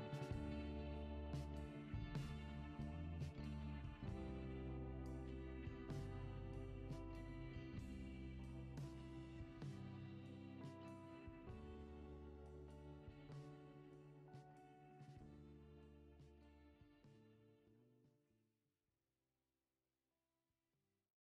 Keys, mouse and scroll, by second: 5.2 click, 5.7-6.5 scroll down 5, 6.7 Tab, 7.8 click, 10.9 scroll down 5, 12.0-13.1 drag.